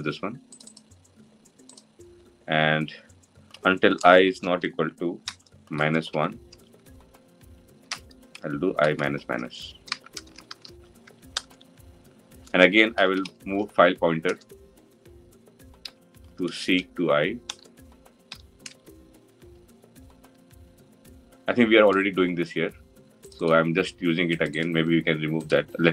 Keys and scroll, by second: 14.0 Return.